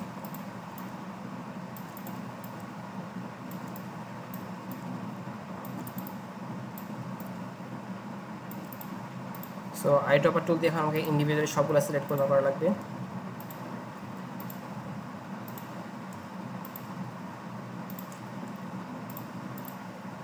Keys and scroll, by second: 10.1 i, 11.5 v, 12.7 i, 14.0-16.1 typing, 17.2 i, 18.5 v, 20.1 i.